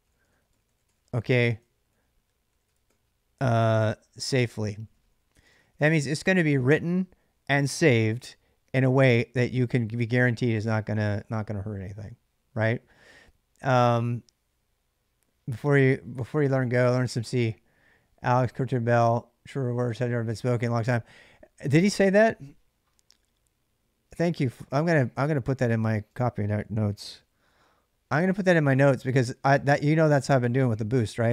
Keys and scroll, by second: 0.0-6.2 typing, 26.6 ctrl+a, 26.8 c.